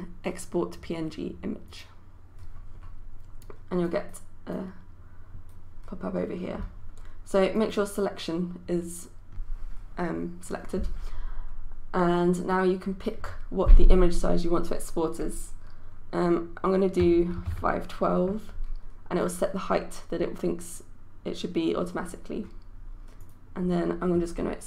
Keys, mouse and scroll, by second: 17.1 KP_5, 17.4 KP_1, 17.5 KP_2, 19.2-24.6 drag.